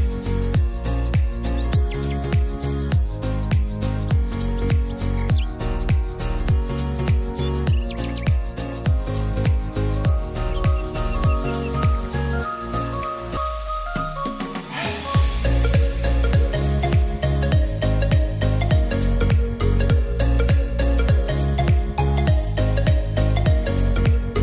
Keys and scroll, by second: 9.3 Delete, 21.9 Escape.